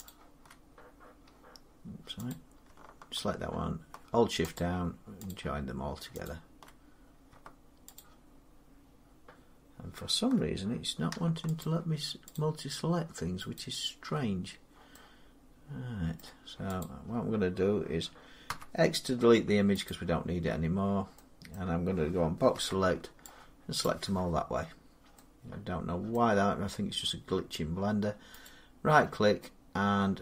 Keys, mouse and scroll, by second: 0.4 click, 2.2 click, 4.4 shift+click, 5.4 shift+click, 7.8 click, 11.5 shift+click, 13.4 shift+click, 16.0 middle click, 16.7 click, 18.3 x, 19.7 click, 20.7 scroll down 2, 21.4 middle click, 22.4 middle click, 22.4 b, 23.7 click, 26.0 middle click, 26.5 scroll up 2, 27.5 middle click, 28.3 right click.